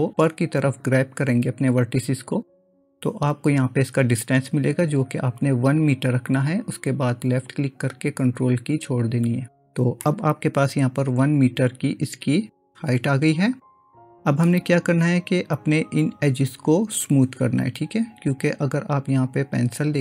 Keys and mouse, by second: 10.1-14.5 middle drag, 19.3 click.